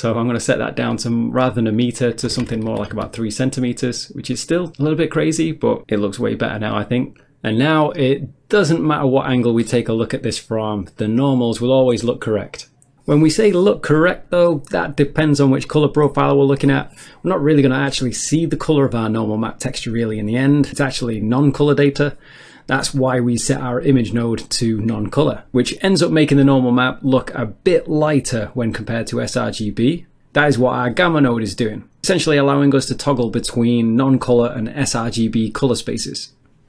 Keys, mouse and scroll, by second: 0.5 click, 2.2-2.7 typing, 3.0 Return, 7.1 middle click, 8.0 middle click, 8.3-9.0 scroll down 1, 9.1 shift+middle click, 10.5 middle click, 12.1 middle click, 12.9 shift+middle click, 23.7 ctrl+shift+click, 25.7 click, 27.3 click, 29.2 click, 31.2 middle click, 32.0 middle click, 32.8 click, 35.1 click, 36.0 click.